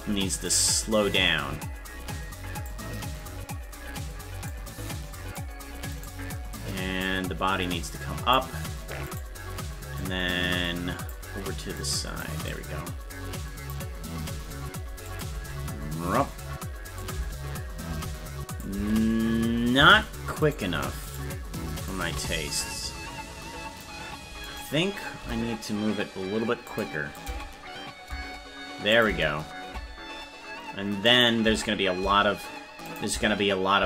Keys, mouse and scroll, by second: 0.4-2.7 drag, 4.5 click, 6.0-7.0 right drag, 7.0-8.3 drag, 9.2 right click, 9.9 click, 10.9-12.2 drag, 12.4-13.7 drag, 15.1 click, 15.3 space, 17.0 click, 18.5 click, 18.7 space, 20.5 right click, 21.2 shift+right click, 21.9 shift+right click, 22.6-23.8 drag, 24.4 right click, 25.2 g, 27.2-28.5 drag, 27.2 space, 28.5 space, 28.9 click, 31.1 click, 31.4 space, 32.9 click, 33.1 space.